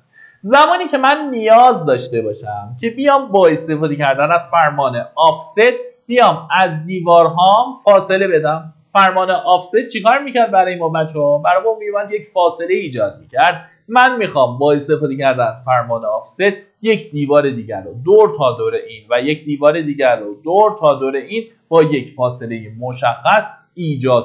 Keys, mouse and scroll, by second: 0.4 middle click, 2.1 Escape, 3.2-24.0 drag.